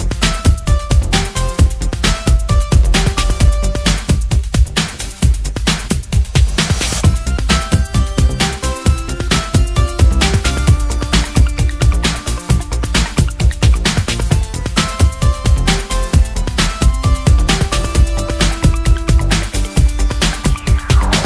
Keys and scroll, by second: 0.7 ctrl+alt+t, 3.2 Up, 19.2 BackSpace, 19.7-20.6 BackSpace.